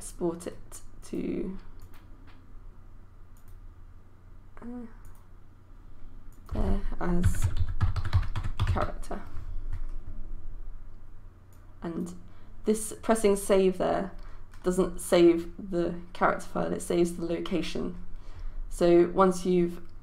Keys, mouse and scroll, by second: 7.1-9.6 typing, 11.6-20.0 drag.